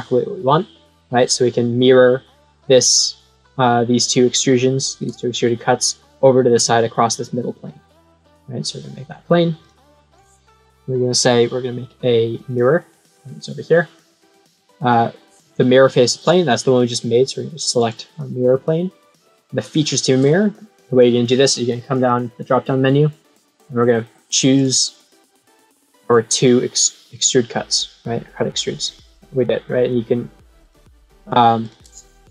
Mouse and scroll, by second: 8.2 click, 9.6 click, 12.3 click, 17.7 click, 21.9 click, 25.5 click, 30.6 click, 31.1 click, 31.6 click.